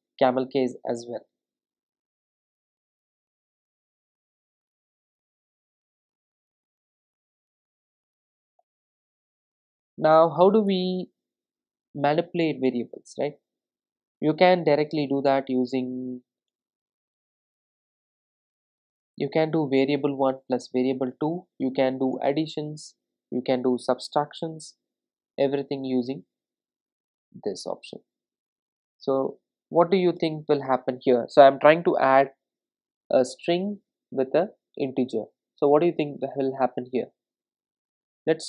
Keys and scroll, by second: 2.7 super+d, 4.0 super+z, 10.7 Return, 17.5 Return, 22.2 Return, 27.5 ctrl+r, 30.2 Return.